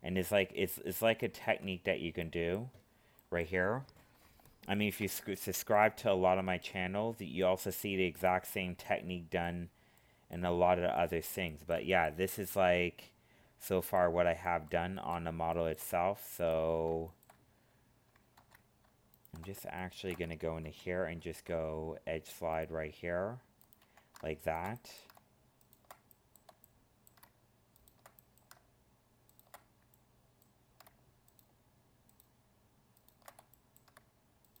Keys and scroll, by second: 18.4 ctrl+Tab, 20.6 ctrl+e.